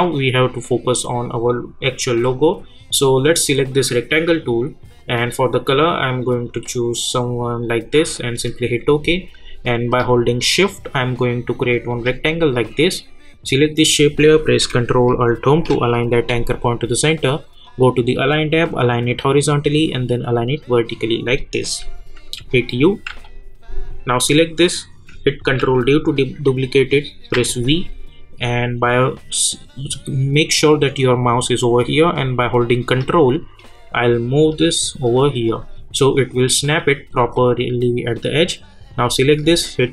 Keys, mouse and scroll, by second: 3.3-12.6 drag, 15.4 ctrl+alt+Home, 17.6 click, 22.4-23.1 typing, 23.9 click, 25.6 ctrl+d, 27.3 v, 28.1-28.5 alt+scroll up 1, 32.2-38.1 drag.